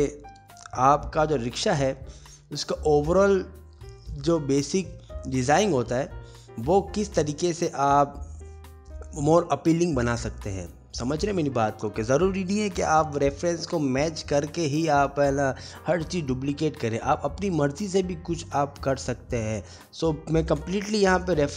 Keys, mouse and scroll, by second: 0.5 click, 0.8 middle click, 1.3 click, 1.6 shift+d, 2.1 middle click, 2.4 scroll down 1, 2.5 g, 2.8 middle click, 3.0 middle click, 3.5 shift+d, 4.1 click, 4.9 click, 5.0 h, 5.1 click, 5.2 g, 5.5 r, 7.3 s, 7.3 g, 7.7 middle click, 7.9 scroll down 1, 8.2 click, 8.3 middle click, 8.4 click, 8.5 scroll down 1, 8.6 middle click, 8.6 scroll down 1, 8.9 click, 9.1 click, 9.5 Tab, 9.5 middle click, 9.6 3, 9.7 click, 9.8 g, 10.4 middle click, 10.4-11.0 scroll down 1, 12.7 click, 12.7 Tab, 12.8-13.2 scroll down 4, 13.1 Tab, 13.1 middle click, 13.1 scroll up 1, 13.2 click, 13.3 middle click, 13.5 click, 13.6 middle click, 13.8 g, 14.3 middle click, 14.7 click, 14.9 middle click, 14.9 scroll up 4, 15.1 ctrl+z, 15.1-15.6 scroll down 2, 15.3 alt+middle click, 15.6 alt+middle click, 15.8 click, 15.9 alt+scroll down 1, 16.1 alt+middle click, 16.1 alt+scroll up 1, 16.1 e, 16.9 middle click, 16.9 scroll down 2, 16.9 scroll up 1, 17.5 click, 17.6 ctrl+z, 17.9 e, 18.0 g, 18.5 middle click, 18.9 middle click, 18.9-19.2 scroll down 2, 19.2 shift+middle click, 19.2 click.